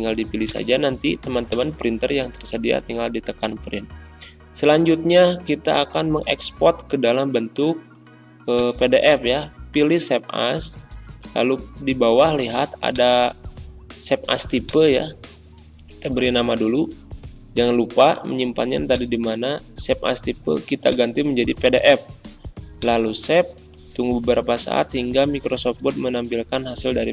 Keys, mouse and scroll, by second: 0.4 click, 8.5 click, 12.8 click, 15.3-17.3 typing, 18.8 click.